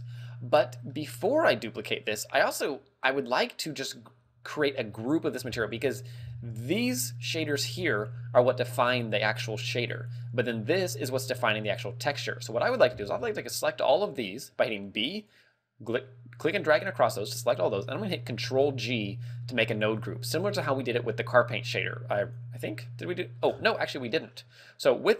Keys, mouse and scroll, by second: 0.5 scroll up 3, 0.9 middle click, 2.0 middle click, 6.3 b, 10.8 click, 12.7 a, 13.0 b, 18.6 ctrl+g, 19.0-19.3 scroll up 5, 20.5 click, 22.9 right click, 23.6-24.0 scroll down 8, 24.1 middle click.